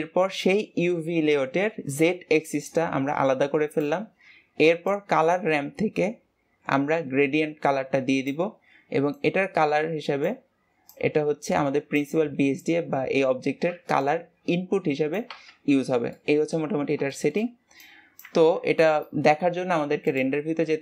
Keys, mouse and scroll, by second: 19.7-20.4 shift+middle drag, 20.4 click.